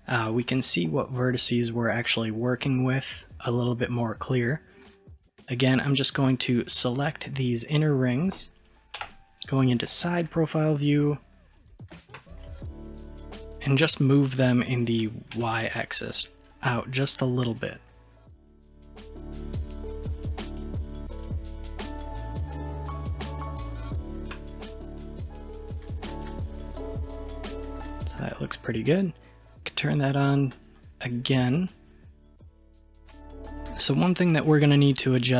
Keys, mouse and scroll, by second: 3.3-5.1 middle drag, 5.1 click, 5.2-6.0 middle drag, 7.0-9.0 middle drag, 9.0 KP_3, 10.3-11.3 scroll up 1, 11.3 scroll down 1, 11.7-14.3 shift+middle drag, 14.3 g, 24.6-25.9 middle drag, 25.9-26.3 scroll down 1, 26.3 click, 26.8-30.0 middle drag, 30.0 click, 30.6-33.5 middle drag, 33.5-33.9 scroll down 2, 33.9-35.3 middle drag.